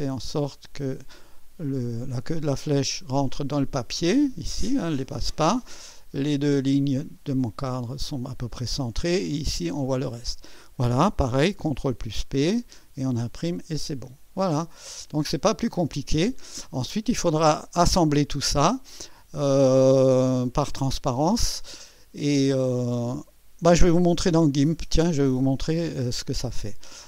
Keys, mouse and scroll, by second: 2.0-4.0 drag, 12.2 ctrl+p, 15.1 click, 26.5 click.